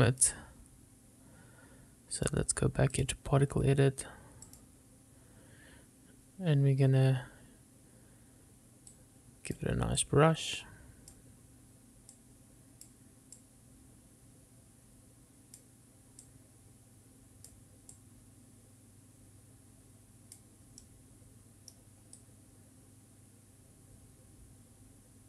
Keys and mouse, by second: 2.4 click, 4.7 click, 9.2 click, 12.4 click, 21.0 middle click, 22.4-25.2 drag.